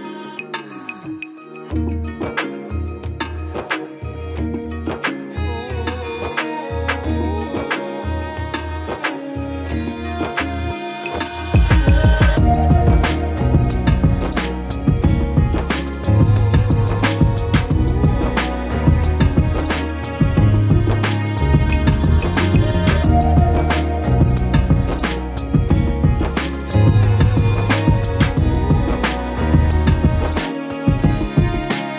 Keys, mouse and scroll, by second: 0.0 click, 0.1-0.5 middle drag, 0.5 shift+click, 0.8 middle click, 1.1 shift+click, 1.5 ctrl+l, 1.7 middle click, 2.4 KP_7, 2.6 scroll up 2, 2.7 alt+z, 2.9 shift+middle click, 3.1 s, 5.2 Tab, 5.4-5.9 scroll down 3, 5.9-7.0 drag, 7.0 alt+z, 7.3 click, 7.4 scroll down 5, 7.6 click, 7.9 click, 8.1 scroll down 1, 8.2-8.7 middle drag, 8.7 click, 8.8 scroll down 1, 8.9 shift+middle click, 9.1-9.4 scroll up 2, 9.4 click, 11.6 click, 11.9 KP_7, 12.2 shift+middle click, 12.3 scroll up 11, 12.6 shift+middle click, 12.9 Tab, 13.0 z, 13.4-14.1 drag, 14.5 x, 14.9 Tab, 15.4-16.0 drag, 16.0 alt+z, 16.3 alt+z, 16.8 click, 17.7 shift+middle click, 18.0 z, 18.2 middle click, 18.9-19.6 drag, 19.6 ctrl+z, 19.8 ctrl+z, 19.9 ctrl+z, 20.1 ctrl+z, 20.5-21.5 typing, 21.9-22.6 scroll up 2, 22.6 z, 23.4 g, 25.2 click, 25.8 s, 26.2 shift+middle click, 26.6 click, 27.0 s, 27.3 shift+middle click, 28.2 a, 28.3 scroll up 3, 28.6 g, 29.7 Tab, 30.0 scroll up 3, 30.3 Tab, 30.6 g, 31.2 Tab, 31.5 scroll down 10, 31.8-31.9 shift+middle drag.